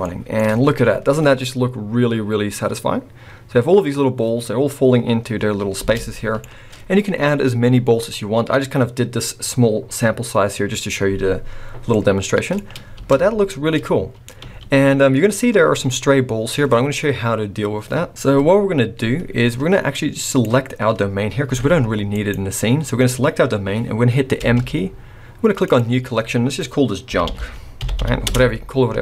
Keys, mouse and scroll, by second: 0.0 shift+middle click, 0.4-0.8 scroll up 2, 5.8 space, 6.0 middle click, 6.3 middle click, 11.9 middle click, 11.9 scroll up 1, 12.5 middle click, 12.9 space, 13.2-14.4 scroll down 2, 14.4 space, 15.8-16.2 scroll up 2, 19.2-19.5 scroll down 2, 20.2 click, 21.5 g, 22.2 right click, 24.4 m.